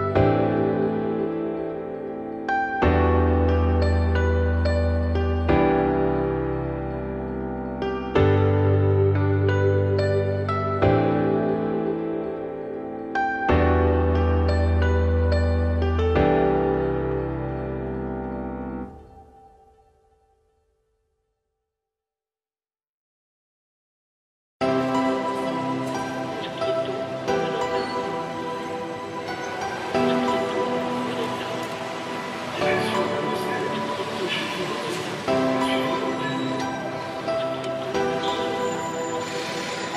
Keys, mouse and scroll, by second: 0.4-1.0 scroll down 6, 1.0-1.4 shift+middle drag, 1.4 Tab, 1.8 a, 2.1 `, 3.3 scroll down 2, 3.5 shift+middle click, 4.5 shift+d, 6.8-7.2 scroll up 3, 7.2 g, 9.1 `, 9.5-11.0 middle drag, 11.0 g, 13.9 scroll down 2, 14.0 middle click, 14.6-15.0 scroll down 6, 15.0 `, 15.4-16.0 scroll down 6, 16.0 shift+middle click, 16.6-16.9 scroll up 2, 16.9 shift+d, 19.0-19.8 scroll up 6, 19.8 `, 20.2 scroll up 1, 20.2-21.3 middle drag, 21.3 g, 26.2 `, 27.0 Tab, 27.5 ctrl+s, 27.8 click, 28.1-28.5 scroll down 5, 28.5-28.9 shift+middle drag, 28.9-29.7 scroll up 3, 29.7-30.3 scroll down 4, 30.3 scroll up 2, 30.6 shift+middle drag, 30.9-31.5 scroll up 4, 31.5 click, 31.8 `, 32.7-33.9 middle drag, 33.9 ctrl+1, 34.5 `, 35.2-37.5 scroll up 2, 37.5-38.7 drag, 38.7-39.2 scroll down 10, 39.2 shift+middle drag, 39.5-39.9 scroll up 11.